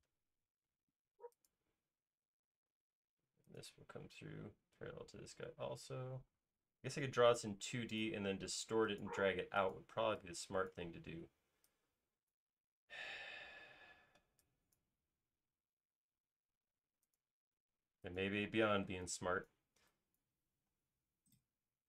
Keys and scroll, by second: 2.3 space, 2.5 l, 4.6 typing, 8.6 l, 10.0 typing, 15.7 typing, 18.4 typing, 20.8 alt+space.